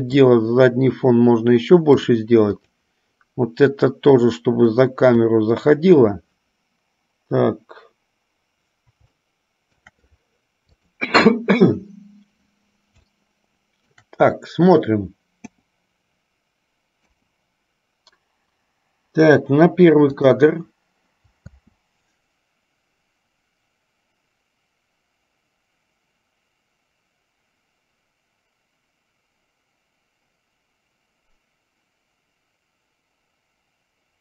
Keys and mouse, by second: 0.4-2.5 drag, 2.8-3.3 drag, 4.5-5.6 drag, 9.4-10.1 shift+middle drag, 11.0 click, 13.4 shift+middle click, 15.6 KP_0, 21.6 space.